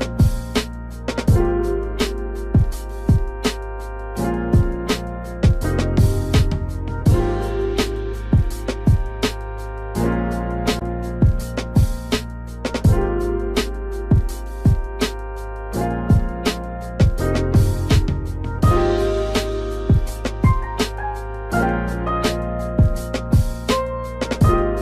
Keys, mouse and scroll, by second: 0.9 ctrl+click, 3.2 click, 3.6 space, 5.4 click, 9.6 shift+click, 11.2 click, 14.8 click, 17.9 click, 19.0 click, 23.9 typing.